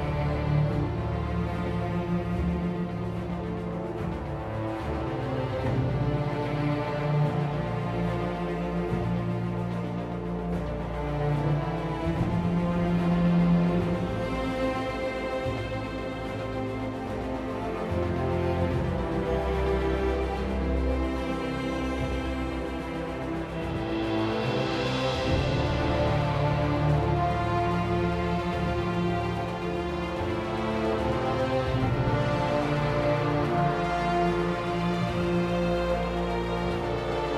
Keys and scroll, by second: 3.1 Delete, 5.1 Delete, 23.3 r, 31.1 r.